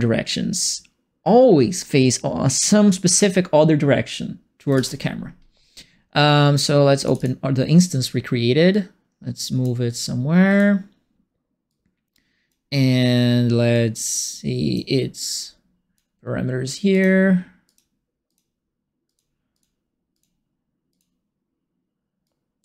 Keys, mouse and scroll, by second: 4.7 ctrl+space, 7.0 click, 7.1 click, 8.7 click, 10.4 click, 11.6 click, 13.7 click, 14.3 click, 15.2 click, 16.9 click, 17.6 click, 18.2 click, 19.0 click, 19.5 click, 20.1 click, 20.9 click, 22.2 click.